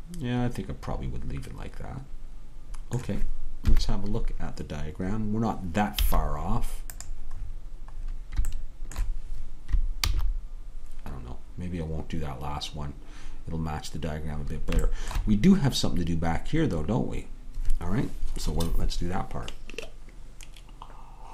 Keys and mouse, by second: 3.7 KP_3, 6.0 z, 10.3 ctrl+z.